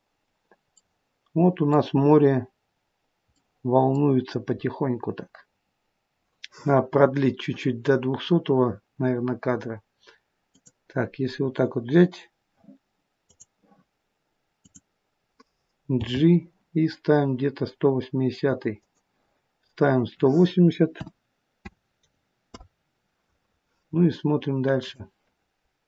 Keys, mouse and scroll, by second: 0.8 middle click, 1.9 scroll up 1, 2.5 scroll up 2, 2.9 scroll down 2, 3.4 middle click, 10.6 click, 13.3 click, 15.8 g, 19.8 click, 24.8 click.